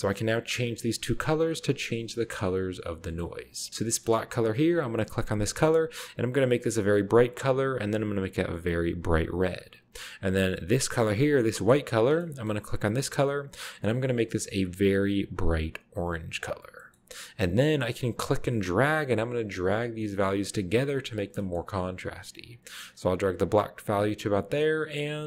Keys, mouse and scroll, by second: 0.0 middle click, 0.1-0.9 scroll up 1, 0.9 click, 2.1 middle click, 3.7-4.7 scroll down 1, 4.0 middle click, 4.7-5.6 drag, 6.6 click, 8.0-9.5 drag, 11.1 click, 12.1 middle click, 12.2-13.1 scroll up 1, 12.8 click, 14.5 click, 16.9-17.9 scroll up 1, 17.9-20.4 drag, 20.7-21.1 drag, 21.3 middle click, 21.5-22.0 scroll up 1, 22.8 click, 24.8 click.